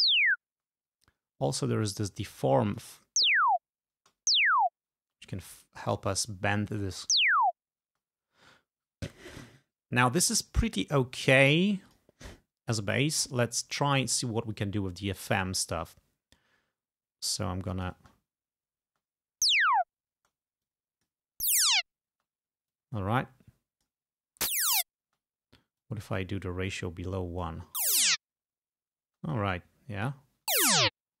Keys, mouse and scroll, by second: 1.6-3.0 drag, 3.3 space, 4.1 space, 7.2 space, 7.9 space, 12.0 click, 17.3 click, 18.1 space, 18.9 space, 21.5 space, 22.8-24.2 drag, 24.5 space, 25.9-27.8 drag, 27.9 space, 29.2 space, 29.4-30.5 drag, 30.6 space.